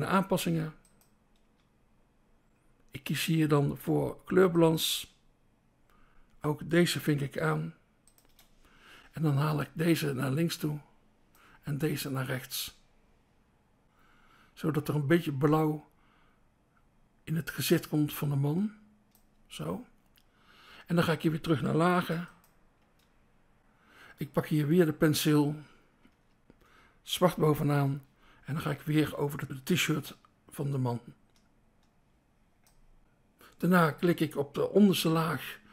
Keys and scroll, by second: 0.6 BackSpace, 3.7 BackSpace, 3.8 BackSpace, 4.9 BackSpace, 8.2 BackSpace, 22.0 BackSpace, 22.8 BackSpace, 26.1 BackSpace, 27.7 BackSpace.